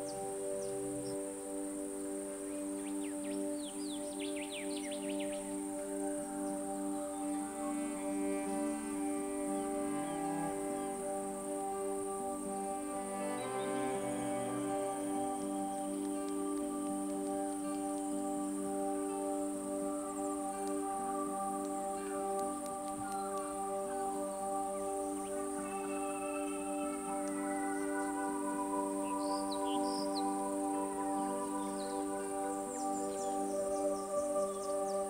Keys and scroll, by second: 7.1 super+a, 7.3 super+c, 8.4 super+-, 8.6 super+t, 9.3 shift+Return, 10.9 super+z, 16.7 super+-, 17.5 super++, 19.7 super+t, 20.2 shift+Return, 23.1 super+c, 24.2 alt+shift+super+v, 25.4 super+t, 25.7 shift+super+-, 26.8 shift+Return.